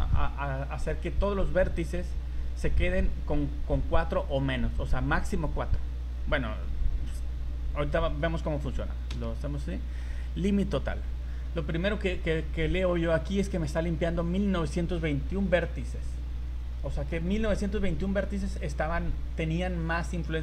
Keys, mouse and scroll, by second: 1.9 right click, 7.7 a, 9.1 a, 10.6 click.